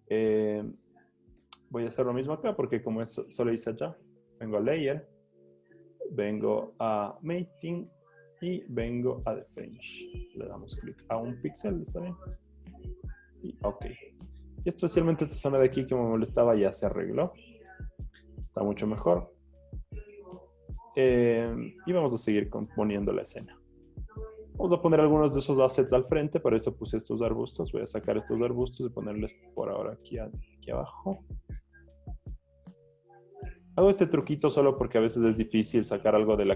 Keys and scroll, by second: 15.6 z, 17.8 z, 18.8 z, 19.7 z.